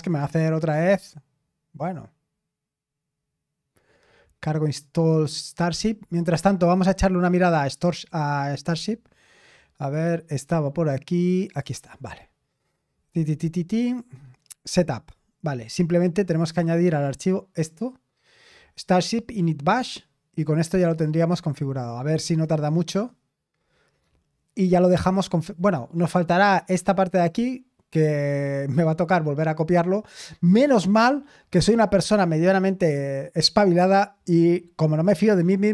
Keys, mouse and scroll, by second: 7.7 click, 8.5 click, 9.8 click, 11.4 click, 14.2-14.7 scroll down 2, 16.5 click, 16.7 click, 17.1 right click, 17.6 click, 21.0 click.